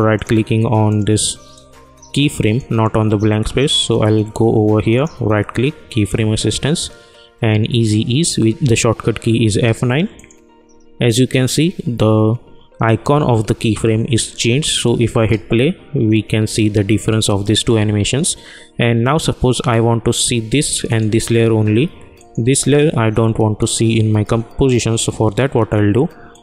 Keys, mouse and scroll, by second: 0.1 right click, 0.8-5.6 drag, 5.6 right click, 10.1 click, 15.1 space, 20.8 click, 25.5 click.